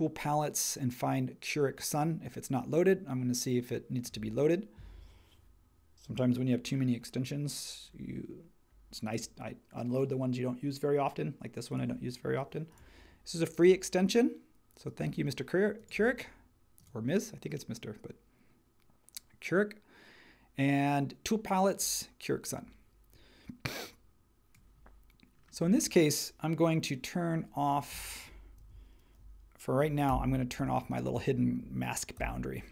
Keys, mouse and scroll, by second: 30.1 super+[, 30.6 space, 32.2 super+e.